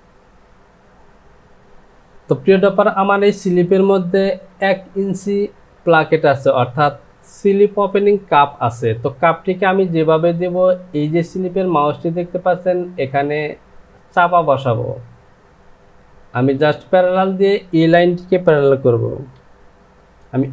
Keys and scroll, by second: 19.9 shift+=.